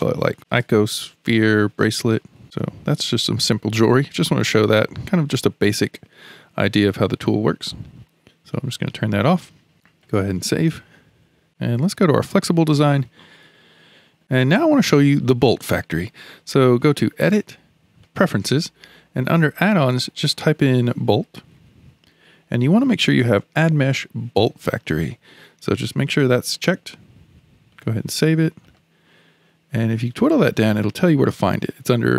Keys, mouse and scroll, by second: 8.5 click, 10.5 ctrl+s, 12.2 click, 17.1-20.2 drag.